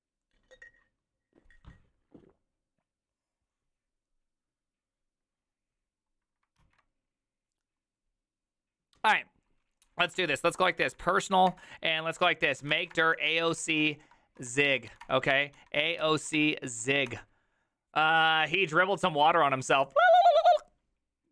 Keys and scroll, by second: 6.6 alt+{, 10.1 ctrl+f, 10.5-17.2 typing.